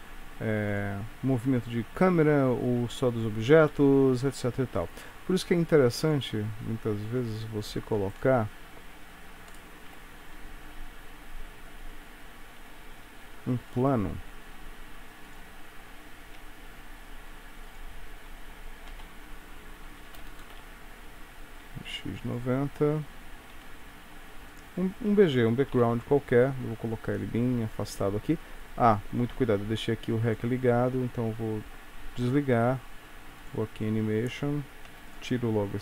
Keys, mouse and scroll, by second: 33.7 click, 35.0 x.